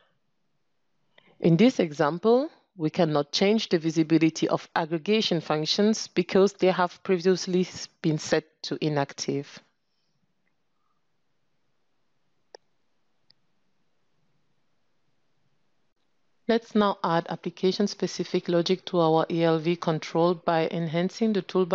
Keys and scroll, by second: 8.8 ctrl+space.